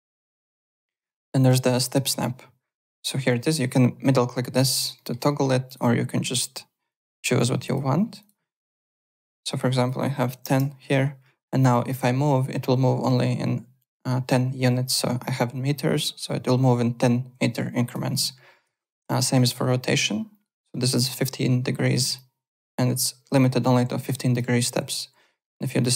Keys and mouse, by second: 1.0 click, 1.4 w, 4.0 middle click, 4.5 middle click, 5.6 click, 6.9 click, 8.2 click, 9.6 click, 10.3 KP_0, 10.3 KP_1, 11.4 click, 18.0 ctrl+z, 19.0 e, 22.1 click, 24.6 ctrl+z, 25.4 middle click.